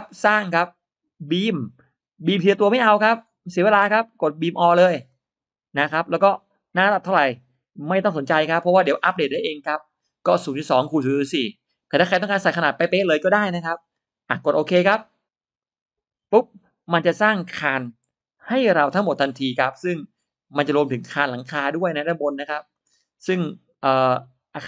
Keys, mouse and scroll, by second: 0.1 click, 5.0 click, 15.5 click, 16.6 scroll down 1, 16.9 middle click, 17.4-17.7 scroll up 1, 18.0 e, 18.2 click, 19.0 scroll up 1, 19.1 middle click, 19.4 scroll down 1, 19.7 middle click, 19.8-20.8 drag, 21.0 middle click, 21.3 middle click, 21.6 scroll down 1, 21.6 middle click, 21.8 scroll up 1, 22.3 click, 22.8 middle click, 23.6-24.6 drag.